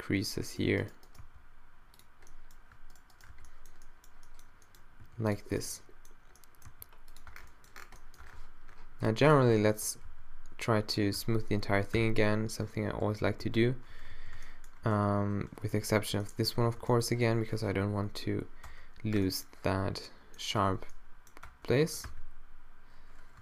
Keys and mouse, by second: 0.6 g, 1.2 g, 2.3 middle click, 2.9 click, 3.3 middle click, 3.3 q, 3.5 click, 3.7 middle click, 3.9 click, 5.1 g, 5.5 click, 5.7-7.3 middle drag, 6.7 g, 7.3 Tab, 8.2 Tab, 9.5 a, 9.7 a, 10.1 q, 11.2 q, 12.0 q, 13.1 z, 13.2 z, 13.4 z, 14.1 shift+z, 15.8 n, 16.5 n, 16.7 b, 17.8 q, 18.7 Tab, 20.6 Tab, 21.5 Tab, 21.9 Tab, 22.1 q.